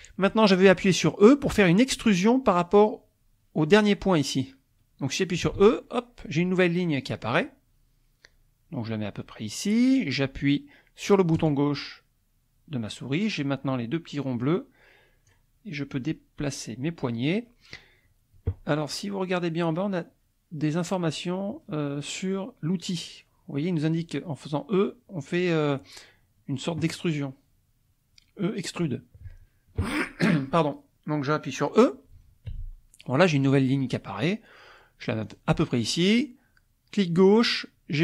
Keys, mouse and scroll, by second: 5.5 e, 11.3 click, 14.5 click, 15.9-17.6 drag, 32.8 e, 35.2 click.